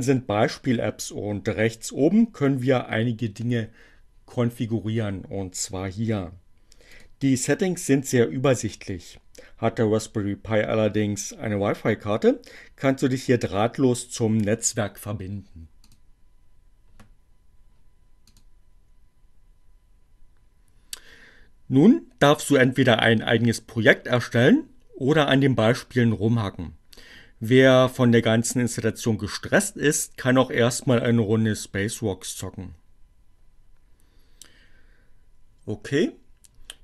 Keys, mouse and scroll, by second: 6.5 click, 15.8 click, 18.1 click.